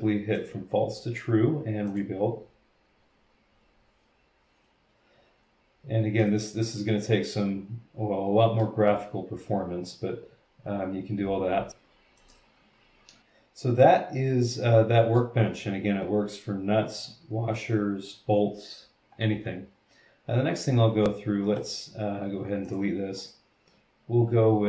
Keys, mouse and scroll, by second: 0.3 click, 1.8 click, 6.2-8.8 middle drag, 12.2 click, 12.3-15.4 right drag, 12.3 middle click, 12.9 middle click, 21.4 middle click, 22.7 click, 23.2 click.